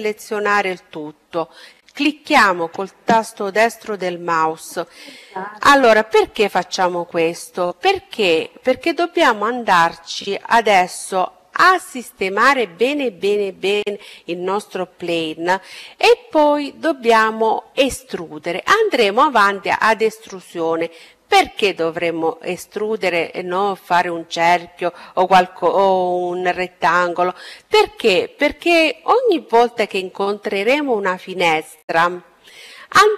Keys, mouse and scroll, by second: 0.7-2.6 right drag, 3.8-5.5 drag.